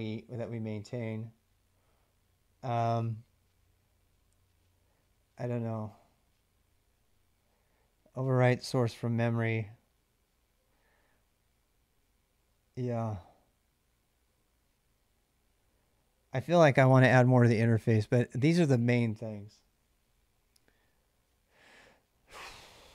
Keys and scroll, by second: 18.1 ctrl+[, 18.1 j, 18.3 j.